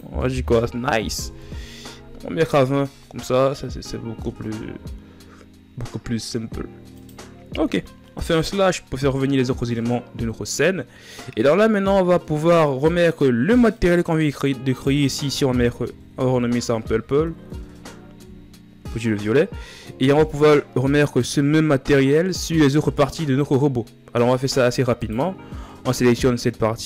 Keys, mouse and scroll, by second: 1.1-4.5 drag, 4.5 a, 8.0 KP_Divide, 24.9-25.8 right drag, 25.8 shift+scroll down 4.